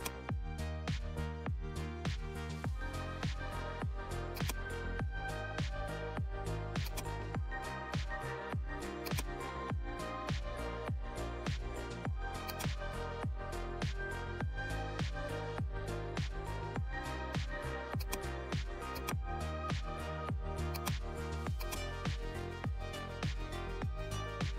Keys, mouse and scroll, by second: 1.8 right click, 4.3 click, 6.3 2, 6.8 click, 9.0 click, 11.0 ctrl+j, 12.4-16.6 drag, 16.6 click, 16.7 alt+scroll down 1, 17.9-24.5 drag.